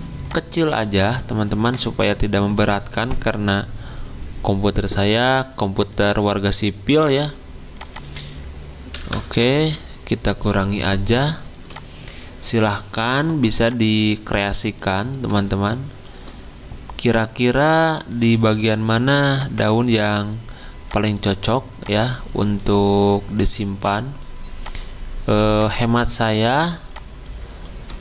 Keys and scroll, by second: 0.9 alt+Tab, 8.7-9.6 typing.